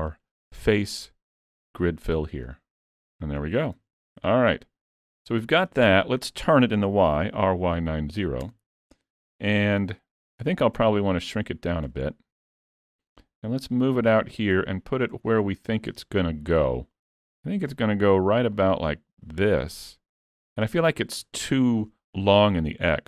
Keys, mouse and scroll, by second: 0.1 click, 3.6 scroll down 3, 3.8 alt+a, 4.3 Tab, 4.6-5.2 scroll down 8, 5.4 shift+middle click, 7.3 r, 10.9 s, 12.1 middle click, 13.7 click, 14.8 middle click, 15.3 shift+middle click, 16.7 click, 18.5 click, 20.3 scroll up 1, 20.4 middle click, 20.9 shift+middle click, 21.3-21.6 scroll up 3, 21.6 shift+middle click.